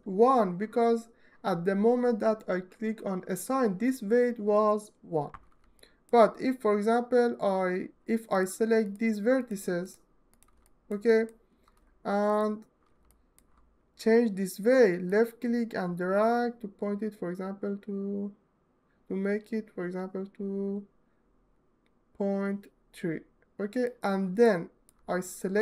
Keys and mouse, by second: 5.7 alt+shift+middle click, 8.0 shift+middle click, 9.5 shift+click, 11.9 ctrl+right click, 14.8-23.5 middle drag, 24.1 alt+middle click.